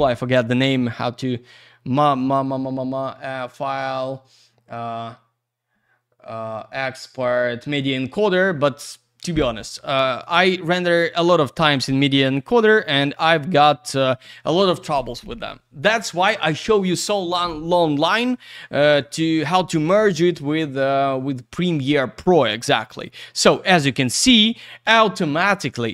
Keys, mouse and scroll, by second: 3.4 click, 10.1 click, 10.2 click, 12.3 click, 12.4 click.